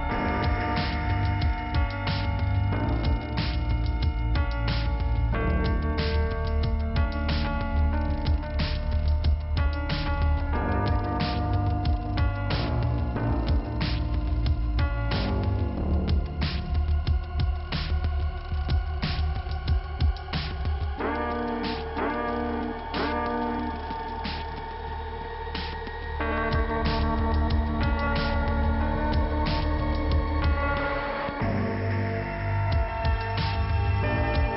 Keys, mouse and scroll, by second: 0.4 scroll up 2, 1.0 click, 1.1 click, 8.4 middle click, 11.6 click, 12.8 click, 13.5 ,, 15.3 click, 16.8 click, 17.6 click, 19.0 scroll up 2, 19.9 click, 20.3 click, 20.4 click, 21.9 click, 22.1 click, 22.2 double click, 23.9 click, 25.0-26.3 scroll up 1, 26.3 click, 26.8 right click, 27.2 click, 27.5 click, 28.7 click, 29.3 click, 30.0 click, 30.7 click, 31.4 click, 31.9 click, 33.2 click, 34.1 click.